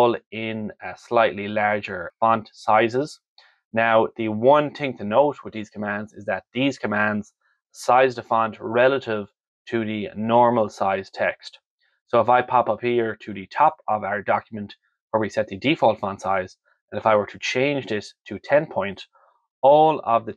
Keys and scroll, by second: 18.0 0.